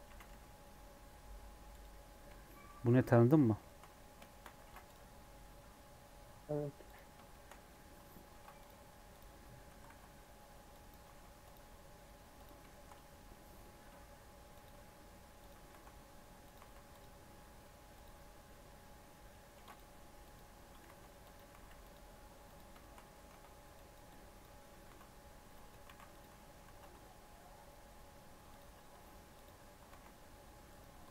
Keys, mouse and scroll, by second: 0.0 s, 2.4 shift+middle click, 3.3 Tab, 3.6 shift+middle click, 3.8-4.2 scroll up 5, 4.2 shift+middle click, 4.6 ctrl+r, 7.3 shift+middle click, 7.5 scroll up 3, 7.7 3, 8.3 ctrl+r, 9.3 scroll up 1, 9.5 3, 9.8 alt+z, 10.7 Left, 11.1 alt+e, 12.6-13.7 shift+middle drag, 13.7 ctrl+r, 16.6 ctrl+b, 16.6 alt+e, 19.5 ctrl+r, 20.8 ctrl+b, 21.5 alt+e, 22.7 shift+middle click, 23.2 2, 23.7 click, 24.8 ctrl+b, 25.6 Tab, 25.8 ctrl+a, 26.2 Tab, 26.6 ctrl+b, 28.7 Tab, 29.4 right click, 29.6 scroll down 3, 29.9 alt+z, 30.6-31.1 drag.